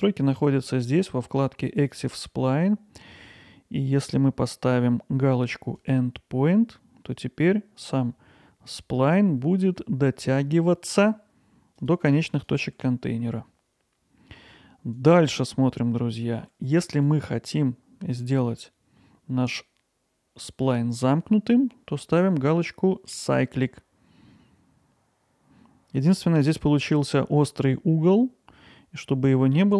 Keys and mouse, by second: 1.8-10.9 drag, 10.9 g, 12.3 click, 12.7 g, 14.9 click, 16.0 click, 16.4 g, 16.9 click, 23.1-26.0 drag, 26.4-29.7 middle drag.